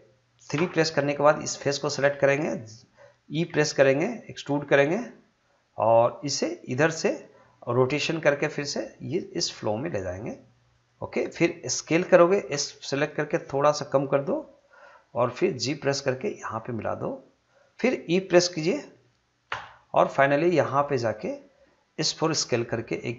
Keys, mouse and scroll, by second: 0.5 right click, 1.5 click, 3.5 e, 7.0 click, 8.3 r, 10.7 click, 12.5 s, 14.5 click, 15.6 g, 17.5 click, 19.5 e, 21.1 click, 22.3 s.